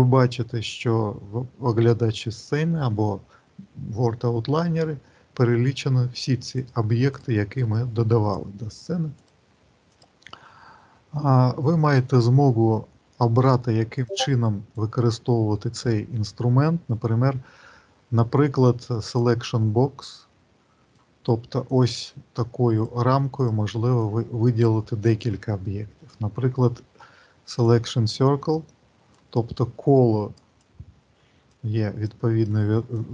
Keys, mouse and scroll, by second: 5.0-6.5 scroll down 2, 6.5 click, 7.0 click, 7.3 click, 9.1 click, 9.7 click, 12.1 click, 13.8 click, 15.0 click, 19.8 click, 21.6 click, 23.2 click, 23.8 click, 25.1 click, 26.0 click, 28.3 click, 29.5 click, 30.5 click, 31.8 click, 32.8 click.